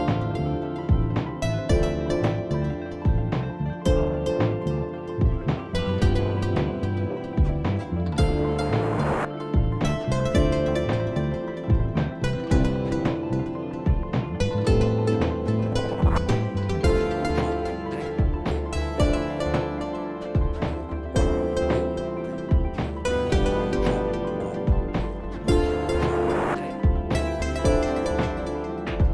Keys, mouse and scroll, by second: 2.0 click, 3.3 click, 8.7 click, 11.8 click, 12.2 scroll, 13.0-13.5 scroll down 1, 13.6 click, 13.6-14.6 scroll down 8, 14.6-15.3 scroll up 3, 15.4 click, 15.5-16.8 scroll up 9, 15.8 click, 17.0 click, 17.0-17.3 scroll, 18.1 click, 20.1 click, 20.8 click, 22.5 click, 23.8 alt+scroll, 25.2-27.2 scroll, 25.3 click, 27.2 click, 27.9 click, 28.7 click.